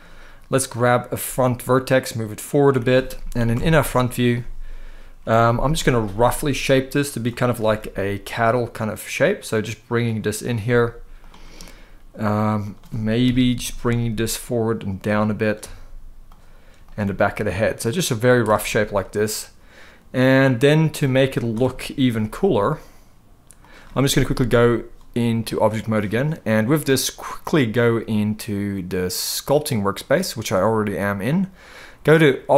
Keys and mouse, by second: 0.3 click, 0.9 g, 2.4 click, 3.2 KP_1, 5.5 middle click, 6.3 click, 7.3 g, 10.4 g, 10.9 click, 11.3 middle click, 12.4 click, 12.9 KP_3, 13.6 g, 14.8 click, 15.2 click, 15.3 g, 16.0 click, 16.5 click, 16.7 g, 18.1 click, 18.4-20.2 middle drag, 21.1 click, 21.3 middle click, 21.7 g, 23.3 click, 25.1 click, 29.7 click, 32.3-32.5 drag.